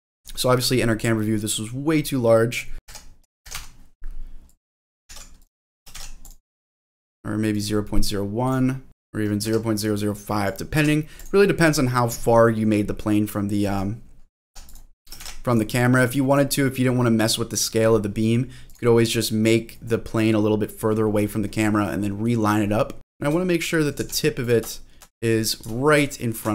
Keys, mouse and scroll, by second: 2.5-5.4 drag, 2.7 ctrl+z, 5.7 ctrl+click, 7.5 click, 8.4 click, 8.9-11.2 drag, 13.7-14.7 drag, 14.9 click, 16.3 click, 18.7 click, 19.1-19.6 scroll down 2, 19.4 middle click, 19.9-21.8 scroll up 2, 23.0 middle click, 23.0 click, 23.0 g, 23.5-24.0 scroll up 2, 24.0 g, 24.4 click, 24.7 shift+middle click, 25.2-25.7 scroll up 3, 26.1 shift+middle click.